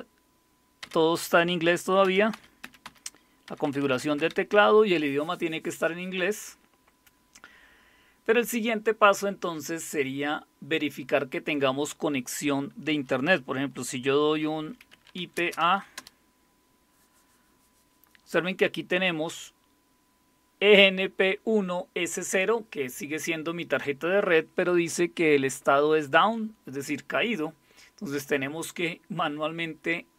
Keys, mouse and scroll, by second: 2.6-4.2 typing, 14.7-16.1 typing.